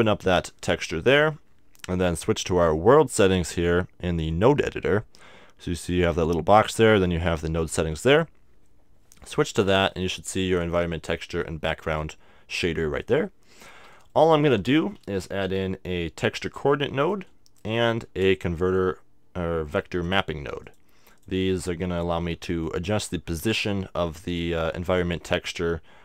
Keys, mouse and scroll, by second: 8.0-9.9 drag, 9.2 middle click, 9.8-12.6 middle drag, 11.4-13.2 drag, 13.1-16.3 middle drag, 15.0 shift+a, 17.1-18.8 drag, 17.6-18.8 middle drag, 18.0 shift+a, 20.7-23.4 drag.